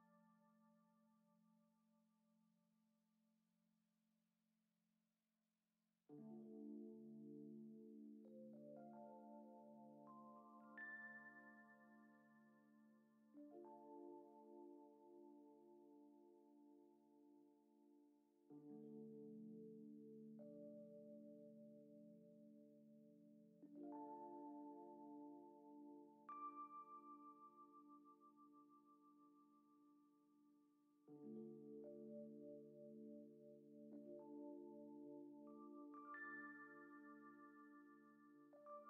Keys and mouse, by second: 1.0 F6, 1.0 n, 2.2 middle click, 2.8-3.9 drag, 4.1 click, 5.9 shift+middle click, 6.6 Tab, 7.2-7.5 middle drag, 8.0 middle drag, 9.2 alt+shift+click, 9.8 shift+click, 11.0-11.7 drag, 11.8 click, 13.0 click, 14.7 click, 16.0 click, 17.2 shift+middle click, 17.7 shift+middle click, 18.8-19.2 alt+shift+drag, 19.3-19.7 shift+drag, 19.8 alt+shift+click, 21.3 alt+shift+click, 21.7-22.2 shift+middle drag, 22.2 shift+drag, 22.5 shift+middle click, 23.2 alt+shift+click, 23.9-24.4 shift+drag, 24.5 alt+shift+click, 25.5-26.5 drag, 26.6 ctrl+Tab, 27.5 drag, 29.6 middle click, 29.9 click, 30.8 click, 32.3 F6, 35.6-36.0 drag, 36.6 middle click, 37.0 click, 38.7 click.